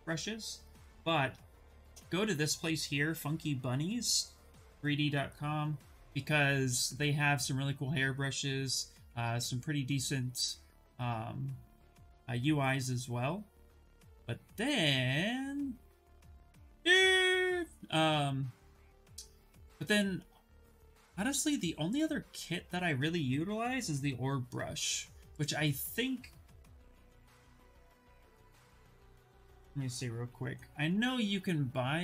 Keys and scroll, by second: 0.6 ctrl+v, 1.6 Return, 26.7-30.1 typing.